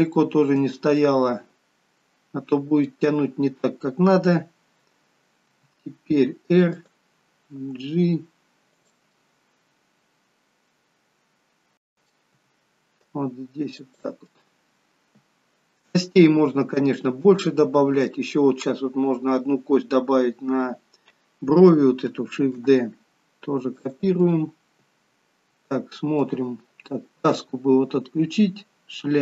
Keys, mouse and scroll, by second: 1.1 middle click, 1.1 g, 9.3 middle click, 9.3 g, 12.3 g, 14.2 middle click, 17.3 middle click, 22.4 shift+d, 24.1 middle click.